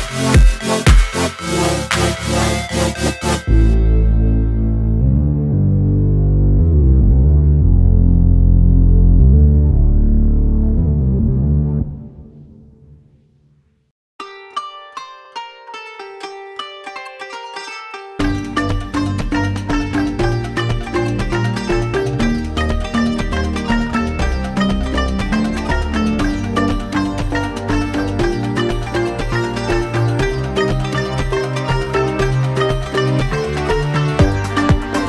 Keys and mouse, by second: 1.3 shift+d, 1.6 s, 2.2-3.3 drag, 2.8 s, 3.3-4.6 middle drag, 4.6-6.7 drag, 5.5 KP_1, 6.2 s, 6.7 middle click, 7.1-20.7 drag, 13.4 shift+d, 19.0-21.1 typing, 20.7-23.3 middle drag, 23.3-25.0 drag, 24.1 KP_7, 24.7 r, 25.0-30.2 middle drag, 25.1 g, 25.9 s, 27.8 s, 28.7 s, 30.2-35.0 drag, 32.1 BackSpace.